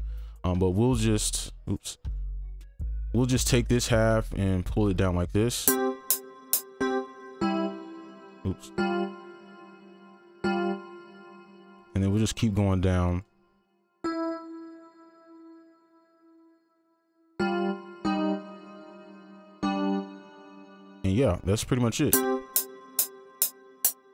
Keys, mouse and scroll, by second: 0.0 shift+Down, 2.1 right click, 2.5 ctrl+click, 3.5 shift+Down, 6.5 space, 6.8 alt+right click, 7.4 alt+right click, 8.3 shift+Up, 8.8 alt+right click, 10.4 alt+right click, 11.5 ctrl+click, 12.2 ctrl+click, 12.3 ctrl+double click, 12.9 ctrl+click, 13.4 shift+Down, 14.0 alt+click, 14.8 right click, 15.2 ctrl+click, 16.8 shift+Down, 17.3 alt+right click, 18.0 alt+right click, 19.1 ctrl+click, 19.4 shift+Down, 19.6 alt+right click, 22.1 space.